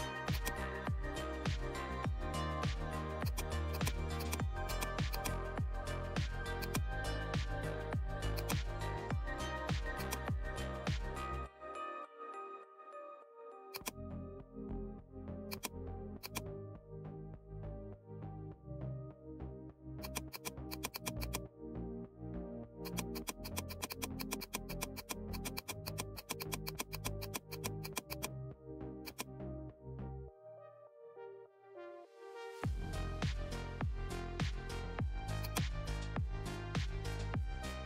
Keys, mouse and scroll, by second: 3.2 click, 3.2 click, 6.6 click, 8.3 click, 8.3 click, 10.0 click, 12.5 right click, 13.7-15.5 drag, 17.1-18.9 typing, 19.9-37.5 drag.